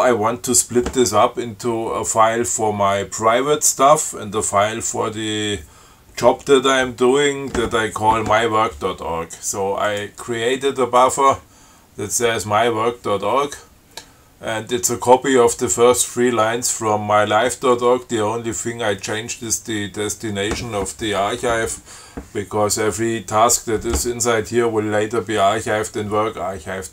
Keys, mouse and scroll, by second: 10.1 click, 11.2 click.